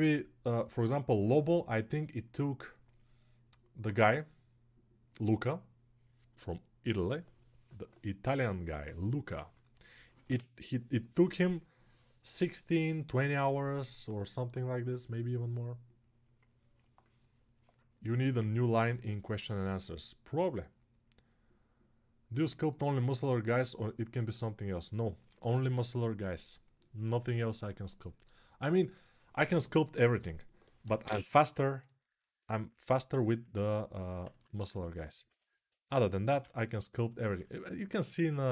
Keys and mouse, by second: 32.5-35.4 alt+right drag, 34.1 alt+q, 35.0 g, 35.4-36.1 [.